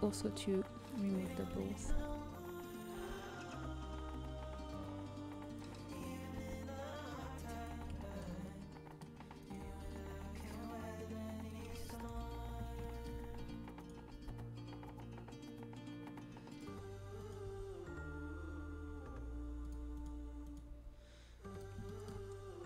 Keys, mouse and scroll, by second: 0.9-2.9 drag, 1.9 a, 2.9 middle click, 2.9 g, 3.7 right click, 4.3 middle click, 6.0-7.7 drag, 7.9 middle click, 9.3-11.3 drag, 10.7 g, 12.0 KP_7, 13.7-15.7 drag, 14.0 g, 17.1-18.5 right drag, 19.9-21.0 right drag, 21.0 g, 21.8-22.6 middle drag.